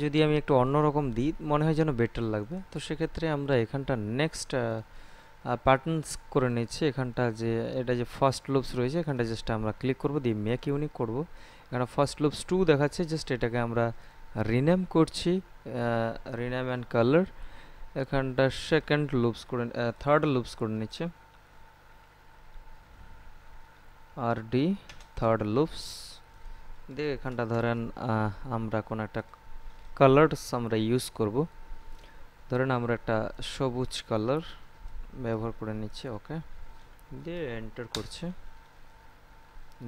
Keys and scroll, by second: 19.8 BackSpace, 22.8 3, 24.0 r, 24.5 d, 24.7 space, 27.1 BackSpace, 37.9 Return.